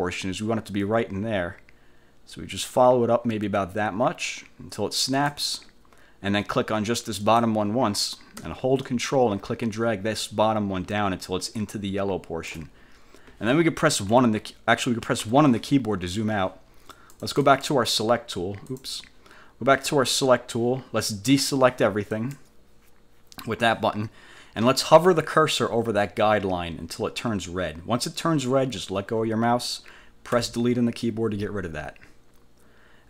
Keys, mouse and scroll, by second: 7.4 click, 9.0-12.8 ctrl+drag, 14.3 F1, 15.3 1, 17.1 click, 18.8 click, 22.3 click, 30.5 Delete, 32.1 scroll down 2.